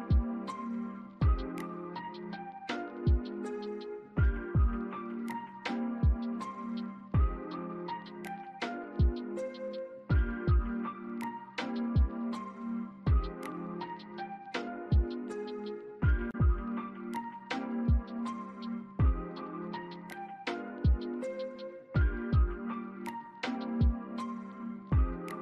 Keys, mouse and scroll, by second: 0.0 alt+middle click, 0.3 alt+scroll up 1, 0.5 scroll down 1, 1.0 alt+click, 4.2 alt+click, 5.3 shift+click, 7.7 shift+click, 8.8 shift+click, 9.9 scroll down 1, 10.2 alt+middle click, 12.3 ctrl+click, 14.1 alt+middle click, 14.5 scroll down 1, 15.0 alt+middle click, 17.2-18.1 typing, 19.9 alt+click.